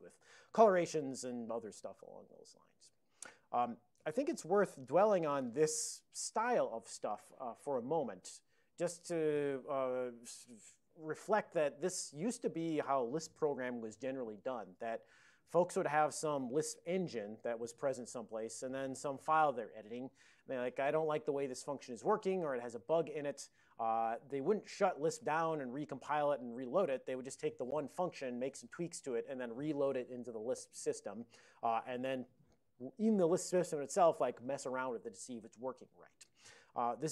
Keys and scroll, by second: 5.1 super+j.